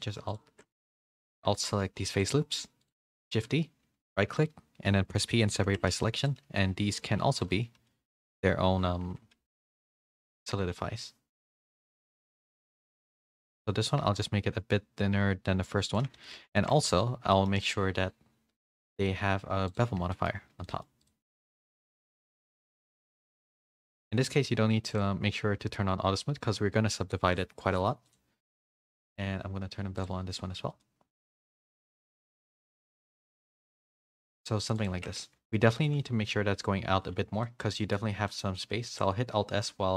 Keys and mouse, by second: 0.8 ctrl+z, 1.0 ctrl+z, 1.5-3.0 alt+shift+drag, 3.2 shift+d, 4.0 click, 5.1 p, 5.6 Tab, 5.9 a, 6.1 a, 6.4 g, 7.7 g, 9.0 Tab, 9.4 a, 9.7 Tab, 10.3-11.4 drag, 12.5-15.9 shift+drag, 16.1 a, 16.3 a, 16.5 shift+middle click, 17.3 shift+middle drag, 17.6 middle click, 19.4 click, 20.1 shift+middle drag, 20.4 a, 20.6 a, 20.6 middle drag, 22.5 click, 24.9 click, 28.1-30.0 drag, 31.9 click, 32.1 click, 32.7 middle drag, 33.1 a, 33.3-34.4 middle drag, 34.9 Tab, 35.2 a, 35.8 shift+middle drag, 37.4-37.9 drag, 38.3 click, 38.9 alt+s.